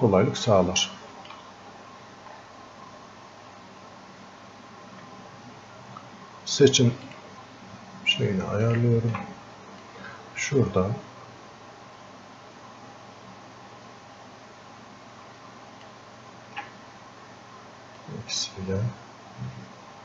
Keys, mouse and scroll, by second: 0.5 alt+click, 1.7-3.9 scroll up 2, 3.9-4.2 scroll up 1, 7.1-17.3 ctrl+shift+drag, 17.3-18.0 scroll up 1, 18.0-20.0 drag.